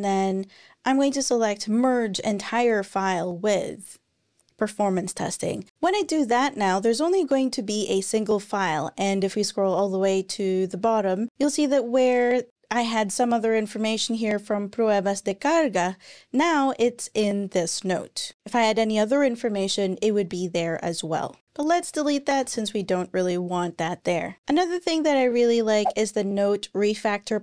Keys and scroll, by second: 22.2 BackSpace.